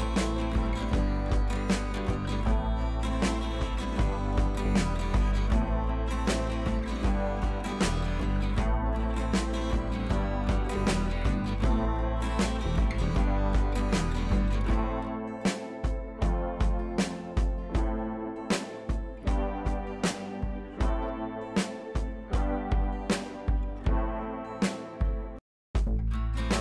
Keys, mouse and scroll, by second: 7.7-9.0 drag, 13.2-19.0 drag, 13.8-15.7 drag, 17.7-18.7 shift+click, 20.3-20.7 shift+drag, 22.6 ctrl+[, 23.3 click, 24.9 ctrl+[, 25.9 scroll down 1, 26.0 shift+click, 26.1 right click, 26.5-26.6 drag.